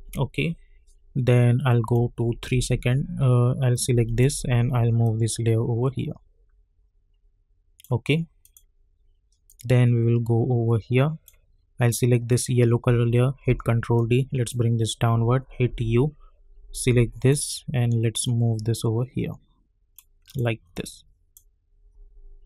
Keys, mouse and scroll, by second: 1.4 click, 2.5 k, 3.7-12.3 drag, 13.4 ctrl+d, 13.9-15.6 drag, 15.6 u, 15.9 scroll down 1, 16.7-22.4 drag.